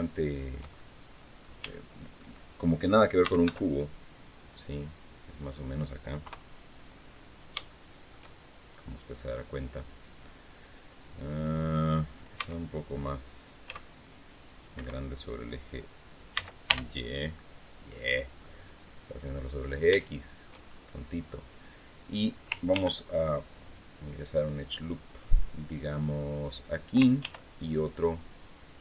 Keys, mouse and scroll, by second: 0.5 shift+middle click, 1.4 shift+middle click, 2.7-3.7 typing, 5.1 click, 6.0 KP_3, 6.7 scroll down 1, 7.4 shift+click, 8.9 click, 10.4-11.7 drag, 12.1 s, 13.4 x, 14.5 Escape, 16.1 s, 16.4 y, 17.8 click, 18.2 click, 19.2-19.6 scroll up 2, 19.8 shift+click, 20.4-20.7 shift+scroll up 2, 22.5 ctrl+r, 23.0 ctrl+click, 26.2 click, 27.0 ctrl+r, 27.4 ctrl+click.